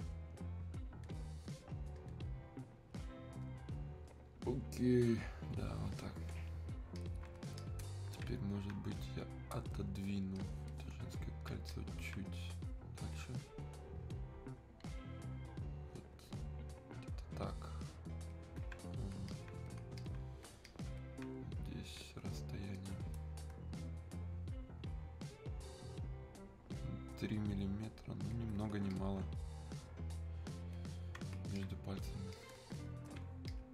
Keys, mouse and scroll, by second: 31.7 alt+click.